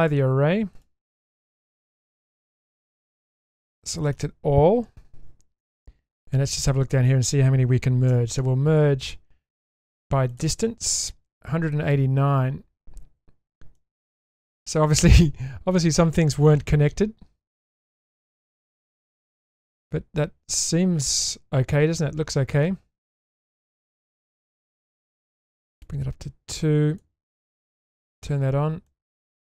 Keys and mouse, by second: 0.2-0.8 drag, 1.2-1.6 middle drag, 2.5 Tab, 3.8-4.1 shift+middle drag, 7.3 a, 8.1 m, 13.8-19.4 middle drag, 19.7 Tab, 20.6-22.6 middle drag, 23.0-24.5 middle drag, 25.8-27.0 drag, 27.5 click, 27.7 click, 28.1 click, 28.9-29.4 middle drag.